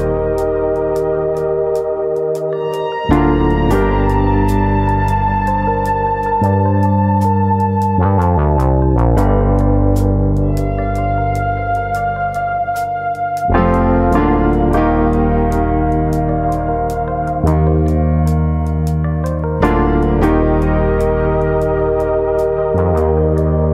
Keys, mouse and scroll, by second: 0.9-2.1 scroll up 5, 1.5 middle click, 2.1 KP_1, 2.6-3.6 scroll up 2, 2.9 shift+middle click, 3.7 click, 5.1 click, 7.0 click, 7.0 middle click, 7.5-8.3 scroll up 3, 7.7 middle click, 8.3 middle click, 9.1 3, 9.6 alt+click, 10.3 middle click, 11.2 ctrl+KP_Add, 11.5 ctrl+KP_Add, 12.7 KP_1, 12.8 ctrl+KP_Add, 14.0 s, 16.0 click, 16.6 click, 17.5 middle click, 18.1 middle click, 18.8 click, 19.4 click, 21.2 middle click, 21.8 middle click, 23.2 middle click, 23.2 1, 23.3 click, 23.5 middle click.